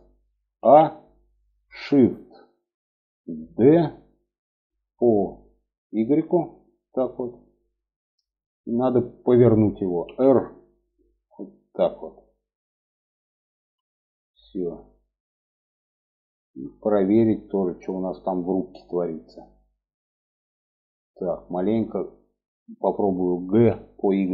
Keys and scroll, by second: 3.8 shift+d, 9.4 r, 22.9 g.